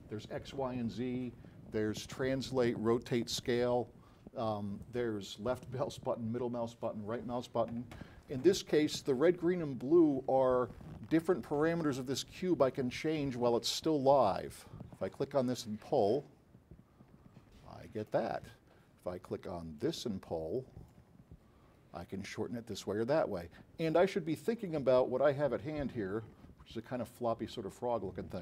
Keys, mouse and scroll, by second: 15.5 click, 19.9 click, 21.1-22.1 drag, 23.0-24.9 drag.